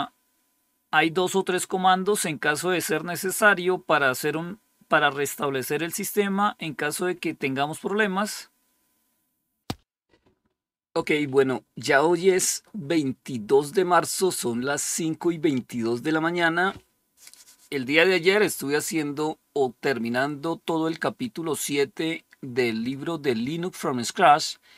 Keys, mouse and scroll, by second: 1.4 scroll down 1, 6.0 scroll up 1, 8.2-9.6 scroll down 1, 22.7 click.